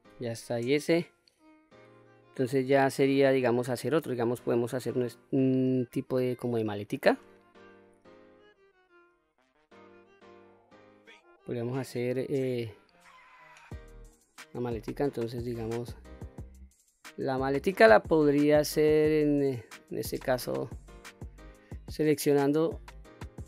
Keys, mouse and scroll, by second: 12.7 middle click, 13.4-13.8 scroll down 1, 13.8-15.3 middle drag, 15.3-15.9 scroll down 2, 16.0-17.5 middle drag, 17.5-18.2 scroll up 2, 18.3-20.3 middle drag, 21.8 click, 23.0-23.4 middle drag.